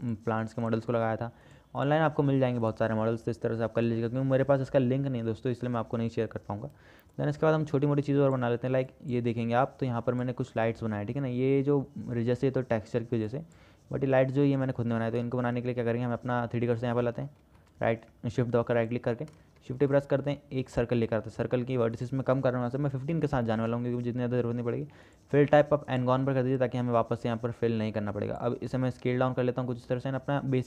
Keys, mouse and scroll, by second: 1.6 middle click, 2.8 middle click, 17.1 shift+click, 19.8 shift+a, 22.2-24.3 drag, 25.3-26.4 drag, 28.0 click, 29.3 s.